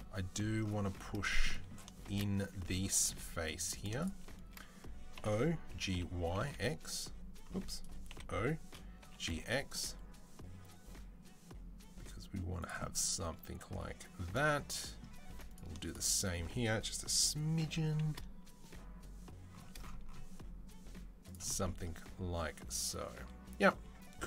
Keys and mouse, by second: 2.9 3, 3.4 click, 5.0 o, 5.5 g, 7.9-15.6 middle drag, 7.9 o, 8.9 g, 15.6 shift+click, 15.7-18.1 shift+middle drag, 17.3 g, 18.1-19.5 shift+drag, 19.5-24.2 middle drag.